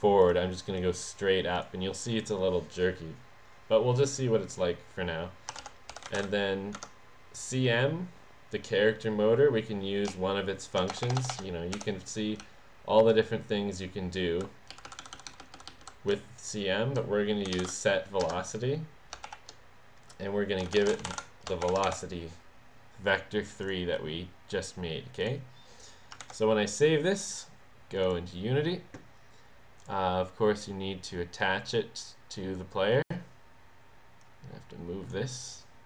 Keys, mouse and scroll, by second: 0.2 click, 0.8 click, 1.6 click, 5.8-6.7 typing, 10.1 BackSpace, 11.0 BackSpace, 11.4 BackSpace, 11.8 ., 12.4 Down, 14.7 Down, 15.3 Down, 15.7 Down, 17.3-18.1 typing, 18.2 Return, 19.3 shift+9, 20.4-22.4 typing, 23.5 click, 25.2 click, 26.3 ctrl+s, 28.0 click, 34.2 click.